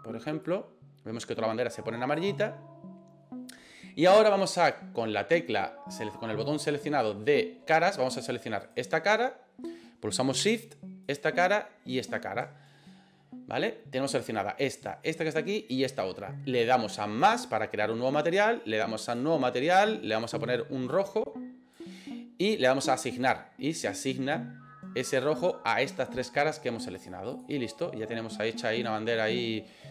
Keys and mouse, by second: 8.7 right click, 11.1 shift+right click, 12.0 shift+right click, 17.4 click, 19.0 click, 20.2 click, 23.2 click, 27.1 click.